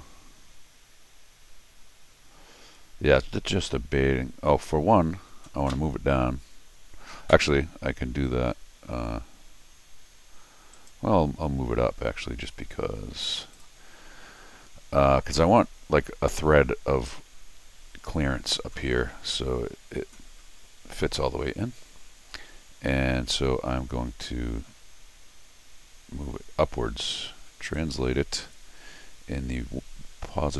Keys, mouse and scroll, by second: 4.2 scroll down 2, 10.7 right click, 13.5 click, 15.5 scroll down 1, 15.9 scroll up 1, 27.7 click, 28.4 click.